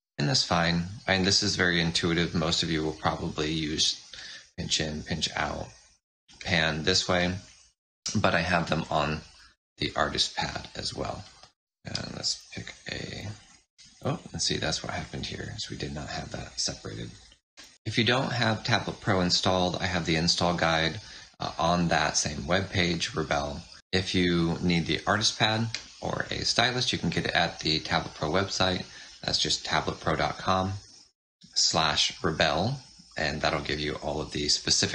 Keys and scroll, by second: 9.3 space, 11.6 shift+n, 12.3 F6, 17.6 F6.